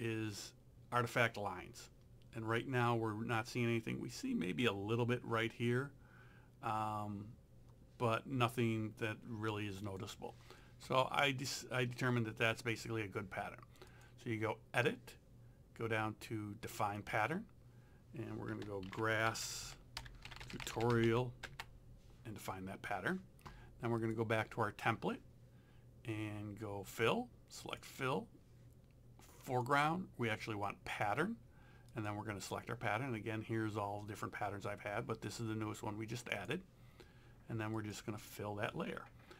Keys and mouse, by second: 9.8 click, 13.9 click, 17.0 click, 18.6-21.6 typing, 24.0 click, 27.7 click, 29.5 click, 35.3 click.